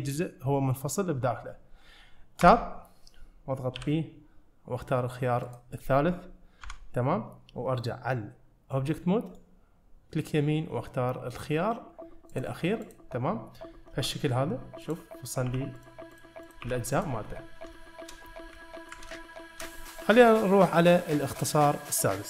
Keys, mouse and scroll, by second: 2.5 Tab, 3.8 p, 6.7 Tab, 9.3 right click, 12.9 click, 14.0 g, 15.3 click, 15.5 g, 16.2 click, 16.5 click, 16.7 g, 17.3-17.7 scroll down 1, 17.8-18.2 shift+middle drag, 18.3 scroll down 1, 19.2-19.7 shift+middle drag.